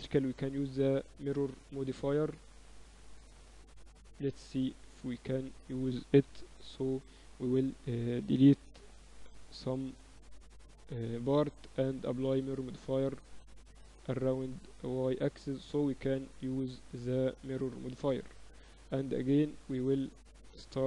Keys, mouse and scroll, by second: 1.4-3.3 middle drag, 2.0 ctrl+r, 5.2 middle click, 5.9-7.4 right drag, 6.6 x, 7.4-10.1 drag, 8.9 shift+s, 10.9-13.9 drag, 14.1-15.2 drag, 15.2-16.7 middle drag, 16.7 Tab, 18.1-20.8 drag, 19.2-20.7 right drag.